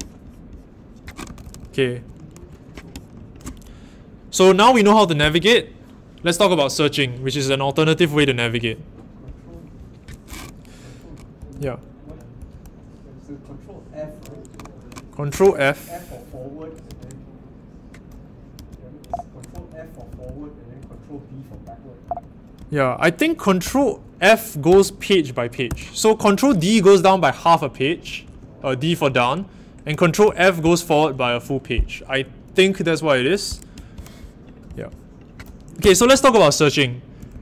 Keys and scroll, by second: 11.3-12.3 typing, 16.8 ctrl+f, 18.5 ctrl+f, 19.0 ctrl+f, 19.3-20.9 typing, 21.5 ctrl+b, 22.0 ctrl+b, 22.5 ctrl+f, 23.6 ctrl+b, 24.6 ctrl+f, 25.6 ctrl+b, 28.2 ctrl+d, 30.2 ctrl+f, 31.3 ctrl+f, 35.8-37.4 typing.